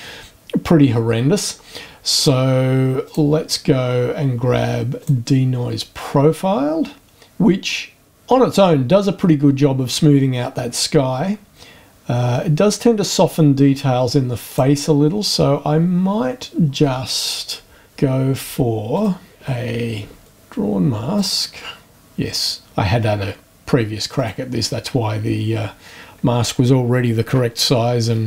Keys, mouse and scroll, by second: 2.1 click, 3.0 click, 5.0 click, 14.5 click, 17.8 scroll down 1, 18.9 click, 20.3-21.4 drag, 24.2 click.